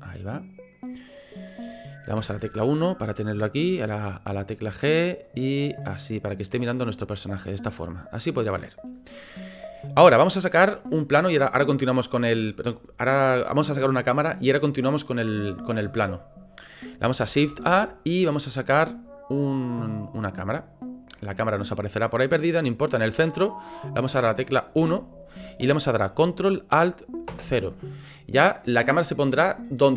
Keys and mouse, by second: 2.1 KP_1, 3.6 g, 4.7 click, 5.5 click, 6.4 click, 7.1-8.2 drag, 17.5 shift+a, 21.7 click, 24.7 KP_1, 27.3 ctrl+alt+KP_0.